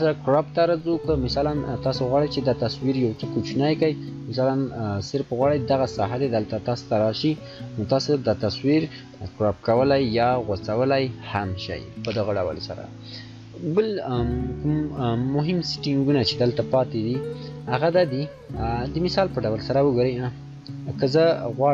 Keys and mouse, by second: 3.4-10.0 shift+drag, 10.0 shift+Return, 18.3 shift+Return, 18.4-21.5 shift+drag.